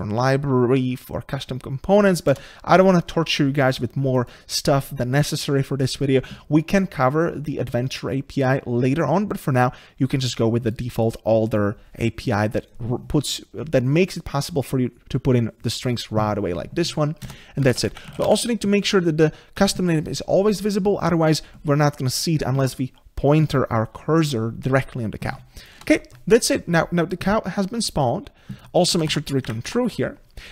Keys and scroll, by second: 2.3 ctrl+BackSpace, 19.6 Tab.